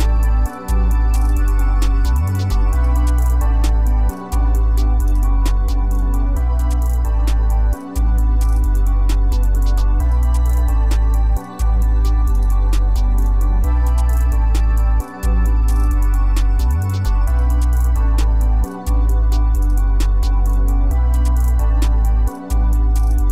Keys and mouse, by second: 2.4 click, 4.9 click, 5.1 click, 6.7 click, 6.8-8.2 drag, 8.2 click, 9.1 click, 10.3 click, 10.8 drag, 11.1 click, 11.5 drag, 12.6 click, 13.5 click, 14.1-15.5 drag, 17.5 click, 17.7 click, 18.5 click, 18.8 click, 21.3 click, 22.9 click.